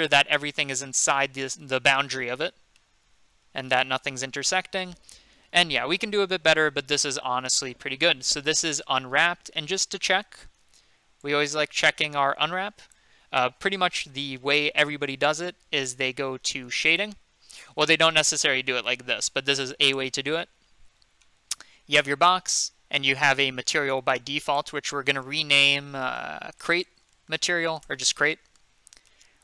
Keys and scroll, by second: 26.3-27.8 typing.